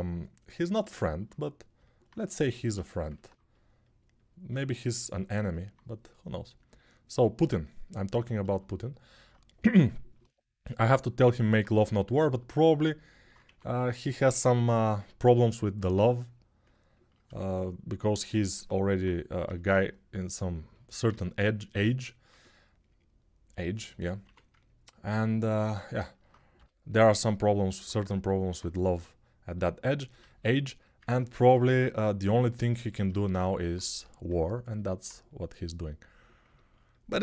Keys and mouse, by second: 13.2 1, 18.1 alt+q, 18.8-37.2 drag, 19.2 g, 20.9 alt+q, 24.0 1, 26.3 g.